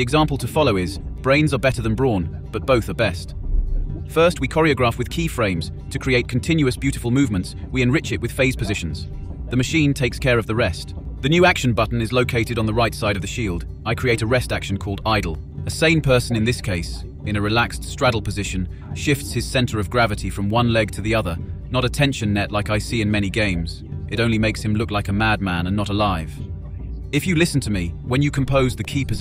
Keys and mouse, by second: 14.7 click, 15.4 click, 16.1 BackSpace, 16.3 BackSpace.